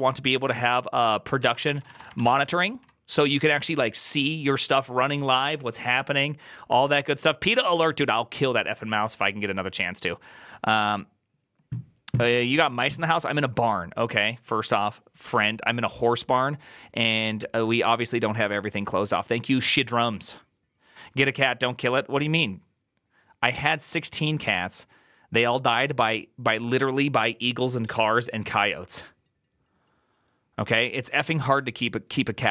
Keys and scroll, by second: 1.1-3.9 typing.